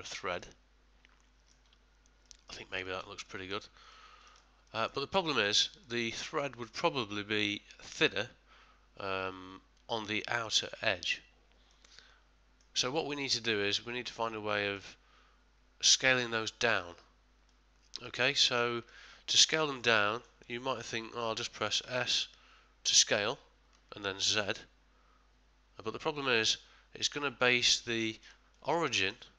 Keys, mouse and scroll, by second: 0.4 middle click, 2.2 middle click, 2.8 ctrl+middle click, 3.3 shift+middle click, 3.9 ctrl+middle click, 4.7 middle click, 5.1 ctrl+middle click, 5.8 middle click, 11.7 middle click, 13.2 middle click, 17.5 middle click, 18.3 ctrl+middle click, 19.9 middle click, 21.8 s, 28.0 ctrl+middle click, 28.5 ctrl+middle click, 28.9 shift+middle click.